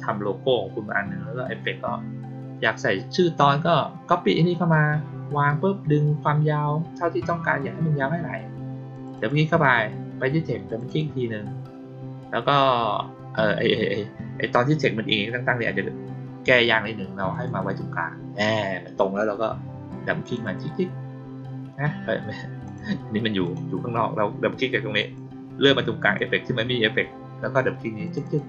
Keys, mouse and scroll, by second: 8.8 click, 9.1 click, 10.6 click, 10.8 click, 17.2 click, 20.1 click, 20.4 click, 22.6 click, 23.4 click, 24.9 click, 26.0 click, 28.0 click, 28.2 click.